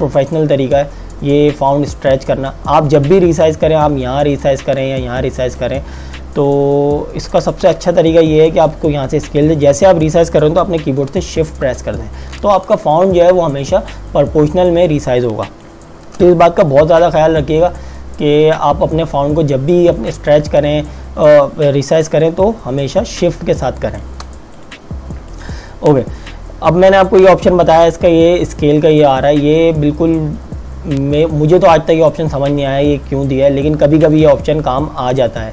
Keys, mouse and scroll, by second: 7.7 z, 10.3 click, 24.6 click, 28.0 click, 32.9 click.